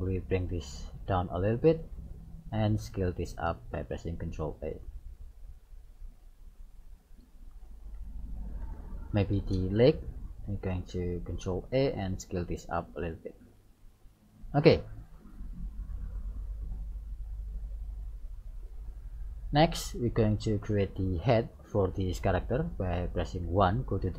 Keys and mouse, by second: 0.0-1.7 drag, 2.6 right click, 3.8 ctrl+a, 7.2-9.1 middle drag, 9.1 right click, 10.8 ctrl+a, 13.4 middle click, 14.0 click, 16.3-18.0 drag, 18.5-20.3 middle drag, 23.5 KP_1.